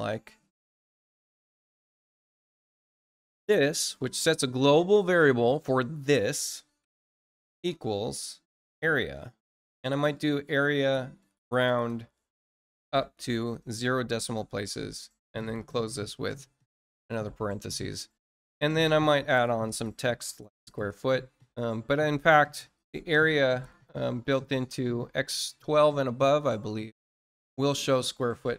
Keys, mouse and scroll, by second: 27.9 click.